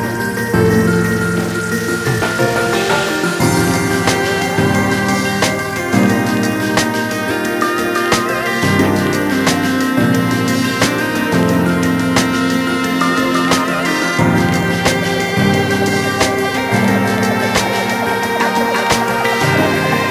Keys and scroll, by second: 19.0 ctrl+z.